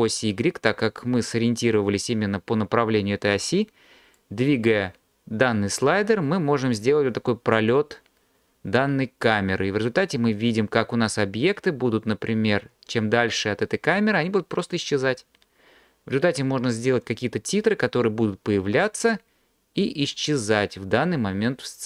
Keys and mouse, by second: 4.2-21.8 drag.